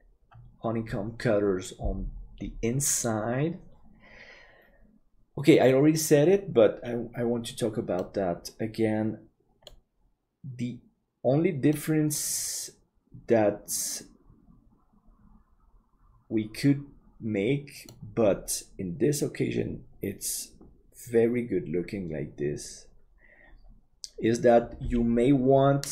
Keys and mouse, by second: 7.9-10.0 middle drag, 11.7-18.1 middle drag.